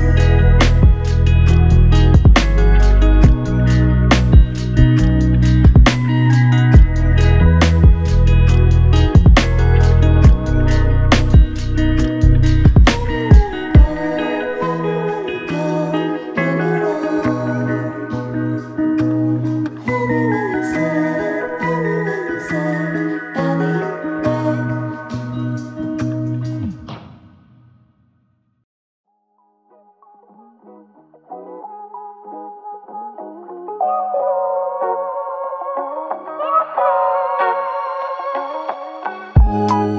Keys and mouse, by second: 1.6 ctrl+click, 6.3 ctrl+click, 7.5 ctrl+click, 8.8 w, 10.3 alt+click, 21.5 typing, 24.5 ctrl+click, 26.3 alt+click, 27.9 ctrl+click, 31.2 ctrl+click, 32.4 w, 33.8 typing, 39.8 typing.